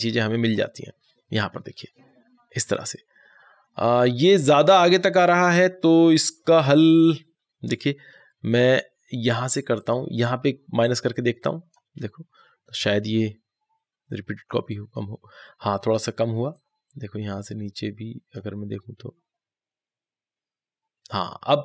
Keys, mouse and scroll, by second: 16.4 click, 16.4-21.6 drag.